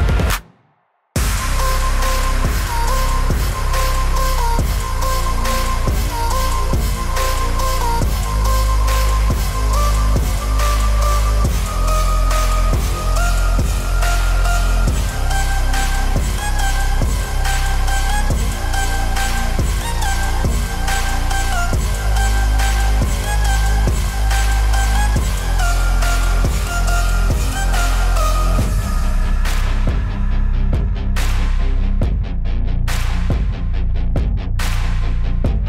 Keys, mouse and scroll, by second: 1.0 click, 2.6 z, 2.9 click, 3.5 space, 3.6 click, 3.6 space, 3.8 x, 5.5 [, 15.9-18.3 typing, 16.0 click, 17.0 click, 18.0 click, 25.2 click, 27.0 b, 27.4 alt+click, 28.5 alt+click, 29.1 click, 31.0 alt+click, 31.2 click, 31.6 ctrl+i, 32.0 click, 35.0 click.